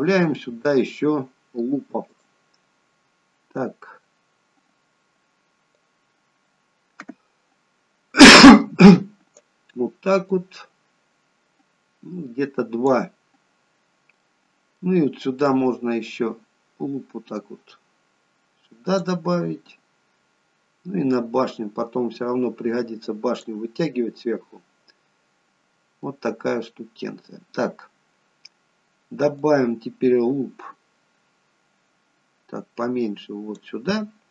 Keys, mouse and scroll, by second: 2.2 click, 5.8 click, 10.4 click, 13.9-14.4 scroll down 2, 14.4 middle click, 15.6 click, 19.5-20.3 scroll down 2, 20.3-21.3 scroll down 1, 21.3 click, 24.0 middle click, 26.8 middle click, 29.6 click.